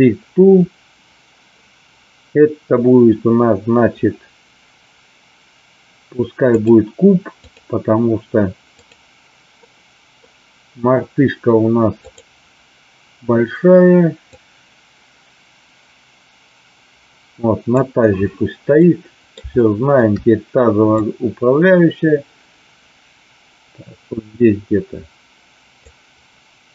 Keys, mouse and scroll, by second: 6.4-7.6 drag, 8.9 click, 9.6-10.2 middle drag, 14.3-17.7 drag, 18.8 middle click, 19.7 shift+middle click, 20.9-25.8 drag.